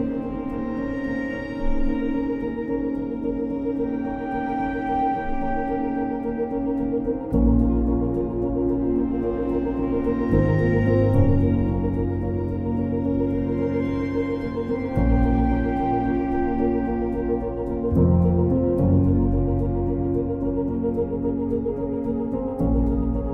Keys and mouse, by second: 0.7 g, 1.0 z, 2.0 click, 2.4 ctrl+click, 3.0 ctrl+click, 3.7 ctrl+click, 4.5 g, 4.9 z, 6.3 click, 8.0 2, 8.3 click, 9.3 e, 9.7 y, 10.8 click, 10.9 1, 11.6 click, 12.3 g, 12.7 z, 13.9 click, 18.0 ctrl+KP_Add, 18.1 ctrl+KP_Add, 18.2 ctrl+KP_Add, 18.3-18.8 ctrl+KP_Add, 18.9 ctrl+KP_Add, 19.7 shift+h, 20.1 z, 22.3 KP_3.